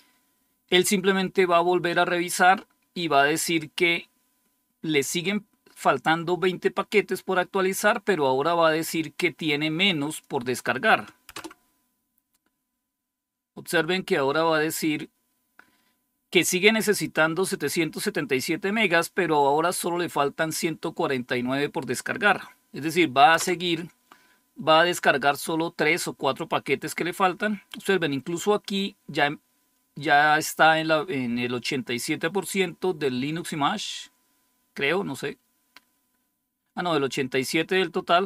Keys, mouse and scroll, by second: 8.7-10.6 drag, 11.2 Return, 17.4 click, 19.3 click, 23.3 Return.